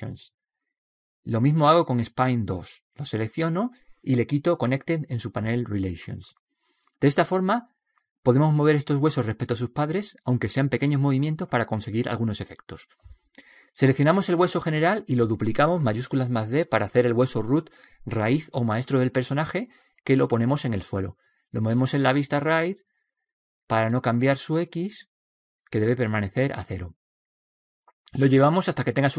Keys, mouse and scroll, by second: 0.3 click, 1.2-2.6 middle drag, 2.6 right click, 5.0 click, 14.2-16.1 middle drag, 15.9 right click, 17.6 shift+d, 19.4-21.9 middle drag, 21.9 g, 23.1-25.4 middle drag, 24.6 g.